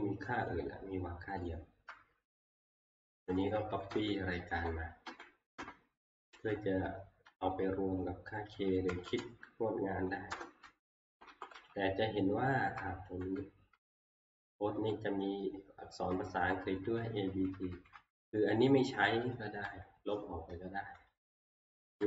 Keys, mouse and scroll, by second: 0.5 click, 1.5 click, 2.6 click, 3.4 Down, 3.9 ctrl+shift+Right, 4.6 ctrl+shift+Right, 5.1 ctrl+shift+Right, 5.6 ctrl+shift+Right, 6.3 ctrl+c, 8.9 Up, 9.2 Up, 11.0 Left, 11.3 Left, 11.6 Left, 11.8 Left, 11.9-12.7 Left, 12.0 Down, 12.0 Return, 13.0 Right, 14.7 Down, 16.1 Down, 16.4 Down, 16.6 Down, 16.8 Down, 17.0 Down, 17.3 Down, 17.5 Down, 17.7 Down, 17.9 Down, 21.4 Delete.